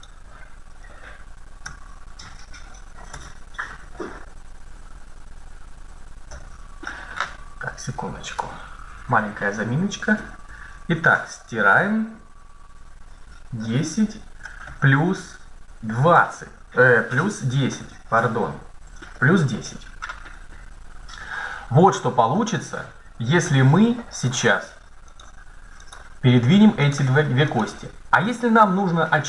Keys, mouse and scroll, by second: 0.3 right click, 0.9 right click, 1.5 Tab, 10.0-11.2 typing, 13.4 KP_0, 14.5 shift+KP_Add, 15.6 KP_2, 16.0 KP_0, 17.3 BackSpace, 17.6 BackSpace, 18.6 KP_1, 18.9 KP_0, 23.3 Tab, 25.0 right click, 27.4-29.2 right drag.